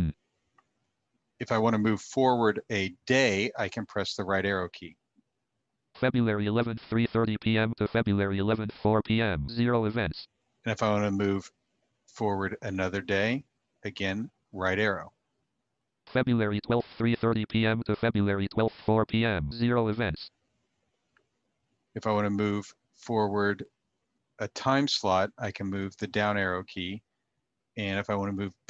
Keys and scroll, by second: 3.4 Right, 14.3 Right.